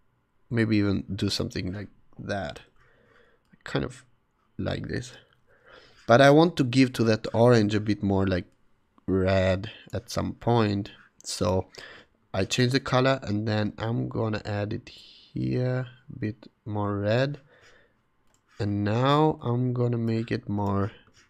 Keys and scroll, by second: 2.6 super+z.